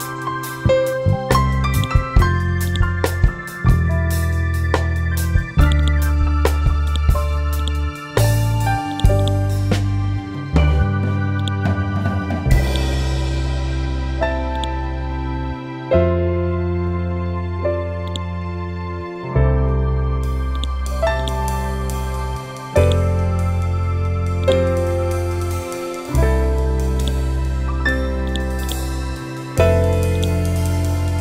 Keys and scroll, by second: 3.9 ctrl+End.